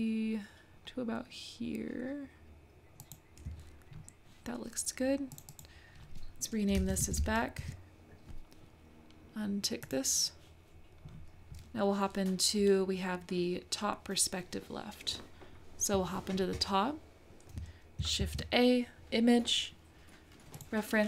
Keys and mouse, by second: 5.3 click, 5.6-8.7 drag, 9.8 click, 18.2 shift+a.